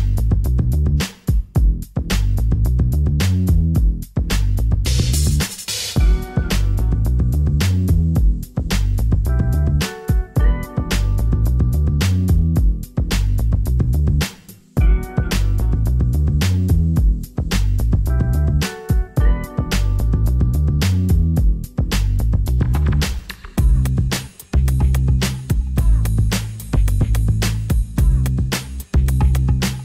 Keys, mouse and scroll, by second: 1.6 z, 3.1 shift+a, 7.0 Tab, 7.8 g, 10.7 x, 19.2 z.